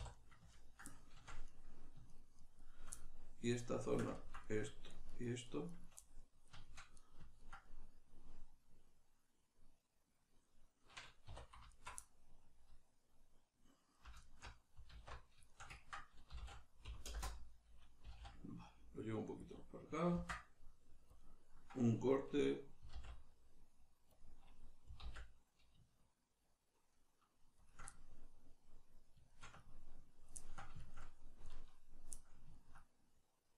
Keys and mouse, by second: 0.1 right click, 0.5 ctrl+right click, 0.9 middle click, 1.4 right click, 2.1 shift+right click, 2.4 shift+right click, 2.6 shift+right click, 3.0-4.9 middle drag, 4.9 shift+right click, 5.1 shift+right click, 5.4 shift+right click, 5.7 shift+right click, 6.0-11.7 middle drag, 11.3 2, 11.7 alt+right click, 12.0-14.2 middle drag, 14.2 alt+shift+right click, 15.0 alt+q, 15.5-19.6 ctrl+shift+middle drag, 16.3 s, 19.6 click, 20.2 ctrl+r, 22.3 click, 22.8 s, 24.2 click, 25.0 alt+s, 27.7 shift+click, 27.9-33.5 middle drag.